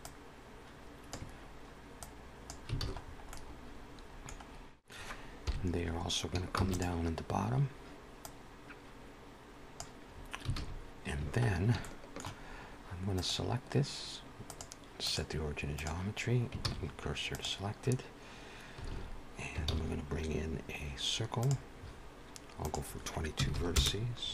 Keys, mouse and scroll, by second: 1.9 click, 2.7 alt+a, 2.9-3.2 scroll down 4, 3.2 middle click, 4.3-4.6 scroll down 1, 4.7 shift+middle click, 5.0 click, 5.3 KP_1, 7.1 shift+d, 8.1 click, 10.0-10.7 scroll up 1, 10.7 alt+a, 10.7-11.2 scroll up 1, 11.6 shift+middle click, 13.1 click, 14.4 click, 16.5 shift+s, 19.2 alt+a, 20.4 shift+a, 22.8 click, 23.4 typing.